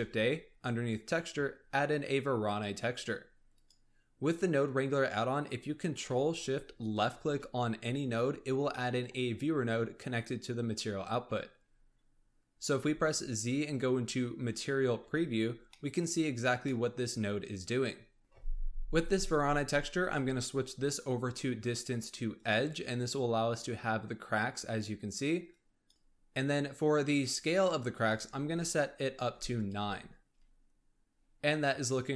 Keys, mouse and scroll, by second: 0.0 shift+a, 5.0-6.8 scroll up 3, 6.8 ctrl+shift+click, 8.4 scroll down 1, 8.7 middle click, 9.1-10.9 scroll up 4, 11.5-12.7 scroll up 4, 12.7 z, 15.6 scroll up 1, 15.7 middle click, 16.4 scroll down 1, 16.5-17.7 middle drag, 17.7-18.2 scroll up 3, 18.2 ctrl+shift+click, 19.9-23.0 drag, 25.4-25.9 drag, 27.8-29.7 drag.